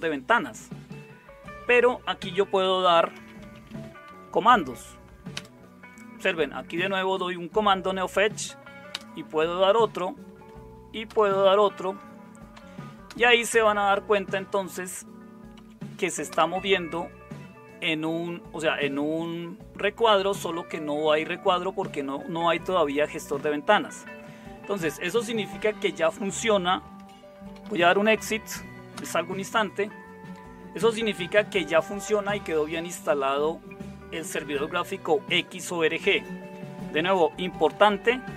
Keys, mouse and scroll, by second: 2.9-4.7 typing, 5.3 Return, 8.1 Up, 8.9 Return, 10.4 Up, 11.1 Return, 12.5 Up, 13.1 Return, 15.5 Up, 16.3 Return, 27.1-28.2 typing, 28.9 Return, 37.5 Up, 37.7 Up.